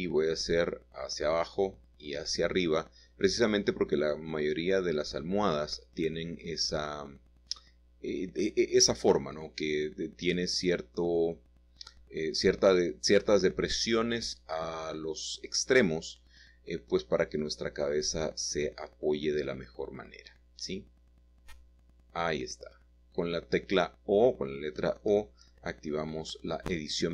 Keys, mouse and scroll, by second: 0.3 click, 1.0 click, 4.3 ctrl+r, 4.9 ctrl+click, 6.0 click, 6.7 ctrl+r, 7.1 click, 9.6 click, 10.4 click, 12.0 click, 15.3 o, 16.5 g, 17.7 z, 18.3-20.4 scroll up 8, 19.2 typing, 21.5-22.1 scroll down 2, 22.9-23.9 scroll down 2, 25.3 click, 26.2 click.